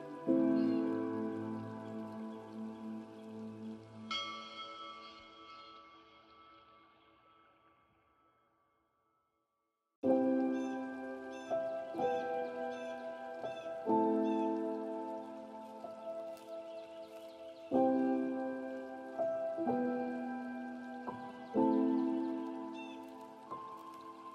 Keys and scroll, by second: 4.4 ctrl+space, 9.5 ctrl+j, 11.9 ctrl+space, 15.1 ctrl+g, 21.8 ctrl+space.